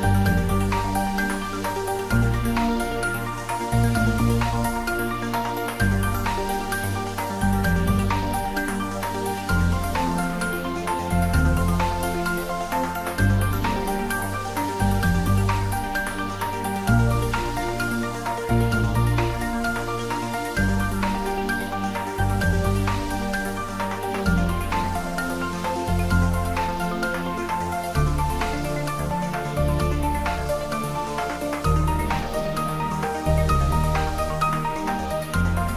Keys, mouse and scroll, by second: 0.8 g, 2.6 z, 4.0 click, 4.4 scroll down 1, 4.7 middle click, 5.2 s, 6.2 click, 6.7-7.9 typing, 8.3 click, 9.9 scroll up 1, 10.6 shift+z, 11.1-11.6 scroll down 1, 12.1 scroll up 1, 13.7 g, 15.5 Up, 16.0 Left, 17.3 space, 18.0 scroll down 1, 18.4 middle click, 19.8 click, 20.3 shift+z, 20.6-21.0 scroll down 1, 21.4-22.7 middle drag, 23.4 scroll up 1, 24.3 scroll down 1.